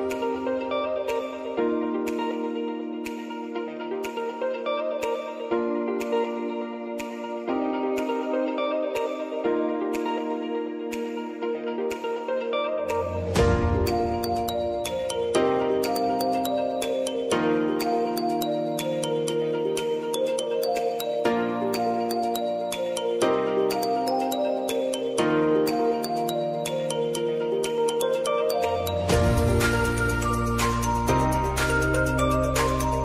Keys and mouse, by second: 0.2 click, 1.1 Return, 3.0 click, 3.4 space, 9.0 space, 9.8-11.8 drag, 11.8-15.0 alt+drag, 15.3 space, 17.9-21.0 drag, 21.0 s, 21.5 click, 22.8 p, 23.1 click, 24.5-25.9 typing, 26.5 click, 28.5 j, 29.6 click, 30.2 Return.